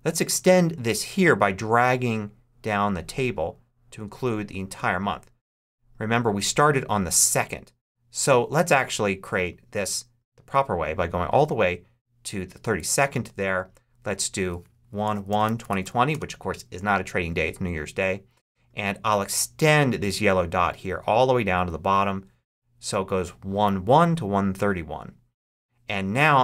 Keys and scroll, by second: 14.4-16.2 typing.